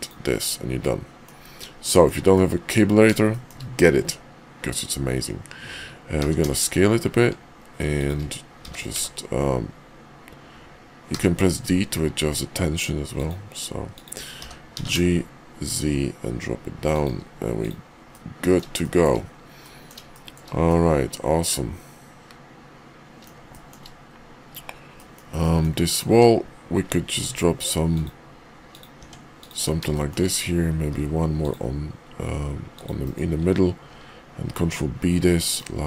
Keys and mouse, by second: 14.4 g, 17.6 click, 18.1 middle click, 18.8 shift+middle click, 19.6 middle click, 20.1 shift+middle click, 20.7-23.2 middle drag, 23.5 shift+middle click, 24.9 middle click, 25.4 middle click, 25.9 click, 26.1 Tab, 27.2 ctrl+r, 29.0 Tab, 29.4 click, 29.8 shift+middle click, 30.8 ctrl+r, 32.0 ctrl+r, 33.8 ctrl+b.